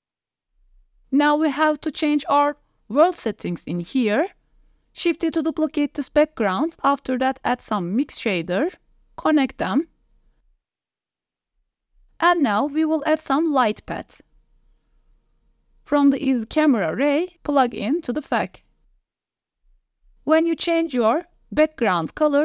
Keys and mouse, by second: 1.0 click, 3.3 click, 4.6 shift+d, 6.4 click, 7.5 click, 8.2 shift+a, 11.2-11.7 drag, 11.8 click, 12.4 shift+a, 16.7-19.0 drag, 21.2 click.